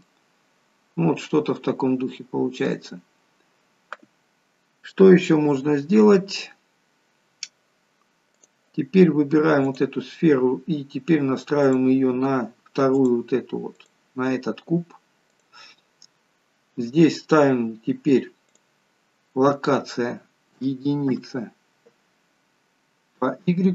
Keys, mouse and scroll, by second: 0.1 middle click, 1.5-2.2 scroll up 4, 2.2 middle click, 2.9 scroll down 1, 6.4 scroll down 1, 8.4 click, 9.7 click, 13.8 click, 15.3 click, 18.5 click, 22.3-22.9 scroll down 3.